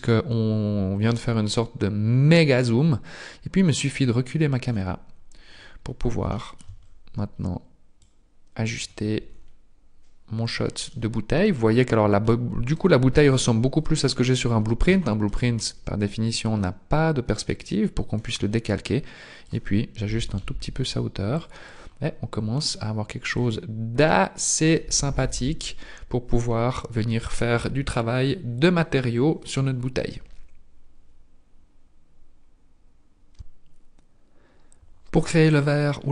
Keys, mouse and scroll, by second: 5.1-6.4 scroll down 4, 6.4 shift+middle click, 6.4 scroll down 1, 6.8-8.0 scroll up 1, 8.0 click, 8.0 scroll up 3, 9.3 scroll up 2, 16.4 click, 21.4 click, 22.1-22.5 scroll down 2, 23.3 click.